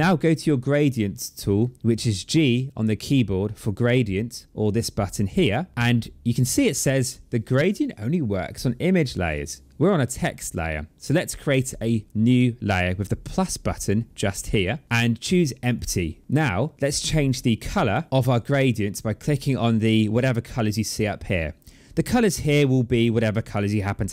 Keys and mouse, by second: 3.8 click, 14.6 click, 15.5 click.